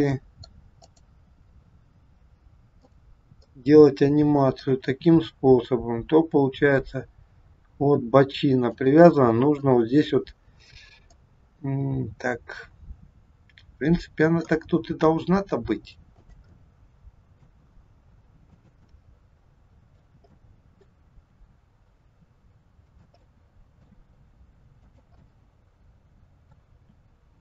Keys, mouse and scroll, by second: 0.7 click, 2.7 click, 3.4 middle click, 4.9 r, 9.0 middle click, 11.1 middle click, 15.4 r, 16.5 middle click, 17.6 r, 18.7 middle click, 20.1 scroll up 1, 20.2 middle click, 21.0 r, 23.1 middle click, 24.0 r, 25.2 middle click, 26.7 r.